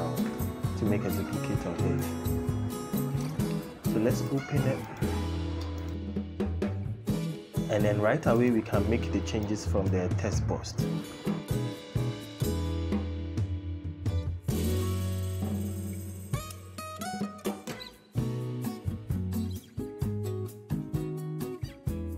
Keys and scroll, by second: 11.3 Caps_Lock, 11.7 g, 13.3 BackSpace, 14.0 g, 14.2 o, 15.5 BackSpace, 15.7 BackSpace, 16.7 Caps_Lock, 17.0 g, 18.0 o, 19.3 Return, 22.0 BackSpace.